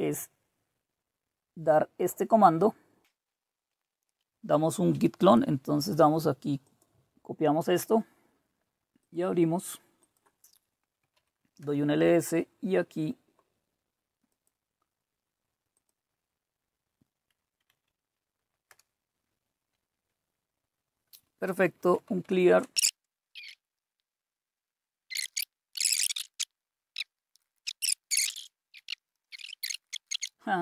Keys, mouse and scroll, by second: 0.6-2.3 scroll down 1, 2.3-4.3 drag, 6.6 right click, 7.6 click, 9.0 click, 10.0 click, 10.7-11.6 typing, 14.3 right click, 14.8 right click, 15.7 click, 17.7 Right, 18.7 Return, 21.5-23.3 typing, 23.7 click, 24.3 click, 25.0-27.9 typing, 25.7 click, 25.9 click, 26.5 click, 27.0 click, 27.8-28.2 scroll up 2, 28.2 scroll down 1, 28.3 scroll up 1, 28.6 click, 29.0 click, 29.0-30.5 typing, 29.1 scroll down 2.